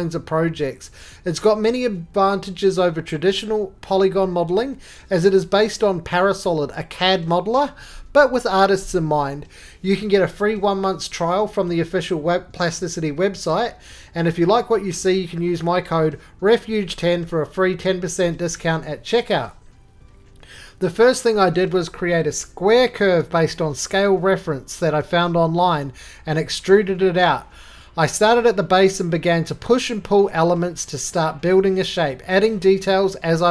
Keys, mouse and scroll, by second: 0.4 Tab, 1.3-2.2 typing, 6.0 Tab, 6.1 typing, 7.3-8.6 typing, 10.2 click, 10.4-11.2 scroll, 10.4 typing, 11.7 scroll, 12.0 right click, 12.3-13.4 scroll, 13.4 shift+middle click, 13.7 middle click, 13.9 middle click, 14.5 middle click, 14.5 middle click, 15.1 scroll, 15.9 scroll, 16.2 middle click, 16.3 click, 16.8-17.1 middle click, 16.9 middle click, 16.9 middle click, 17.0 middle click, 17.4 middle click, 17.8 middle click, 18.2 middle click, 18.3 middle click, 18.5 middle click, 18.6 middle click, 18.6-19.1 middle click, 19.1 shift+middle click, 19.1 shift+middle click, 19.4 shift+middle click, 19.7 click, 21.4 click, 21.4 right click, 21.8 g, 24.7 click, 25.2 right click, 25.4 middle click, 25.5 scroll.